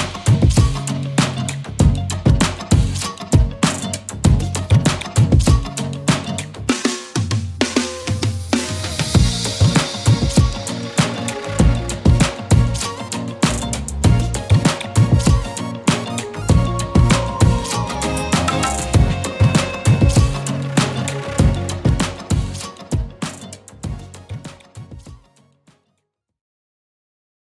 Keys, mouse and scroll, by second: 6.5-9.1 typing, 10.6-12.4 typing, 12.4 Return, 14.2 click, 16.9 scroll up 1, 18.4 scroll down 1, 20.2 click, 24.6 click, 26.4 scroll up 1, 27.0 scroll down 1.